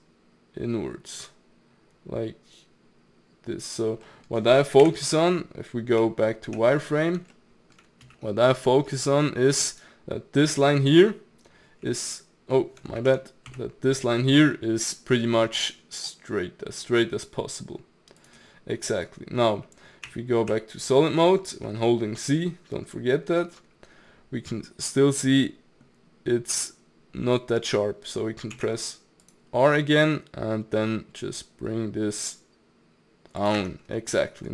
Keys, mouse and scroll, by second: 4.0 middle click, 4.8 KP_1, 6.0 z, 6.8-7.3 scroll up 3, 7.3 shift+middle click, 8.0 s, 11.8 a, 13.0 ctrl+z, 13.5 s, 18.9 middle click, 19.5-20.1 scroll down 1, 20.1 z, 20.8-21.2 scroll down 1, 21.2-22.5 shift+middle drag, 22.5-25.4 scroll up 1, 25.4-28.4 middle drag, 28.6 ctrl+r, 33.6 Tab, 33.8-34.2 scroll down 3, 34.2-34.5 middle drag.